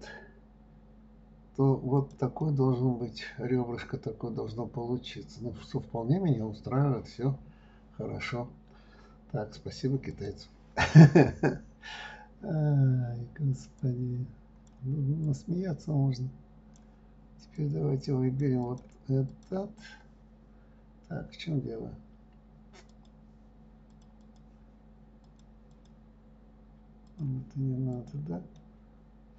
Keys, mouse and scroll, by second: 2.8-5.8 middle drag, 10.5 click, 14.2 click, 15.6-19.8 drag, 23.3 click, 24.3 click, 25.6 click, 26.1 click, 27.5 click, 28.3 click, 28.9-29.3 middle drag.